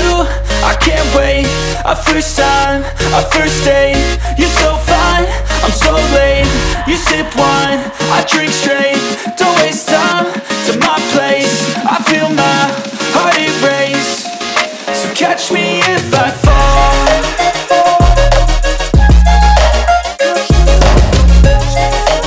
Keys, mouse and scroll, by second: 0.0 scroll up 3, 0.2-1.3 shift+middle drag, 1.3 ctrl+r, 1.4 k, 4.4 3, 4.5 shift+right click, 5.0-6.4 shift+right drag, 6.4 1, 6.7 right click, 7.1 alt+right click, 7.3 s, 7.7 click, 8.3-10.1 drag, 10.1 o, 10.6 s, 12.6 ctrl+b, 15.5-16.5 middle drag, 16.5 Tab, 17.1 ctrl+2, 17.3 s, 20.0 g, 21.9 middle click.